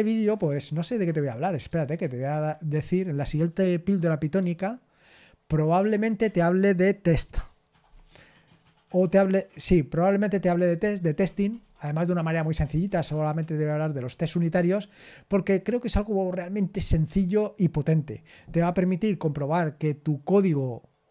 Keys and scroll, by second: 1.6 super+h, 2.3 BackSpace.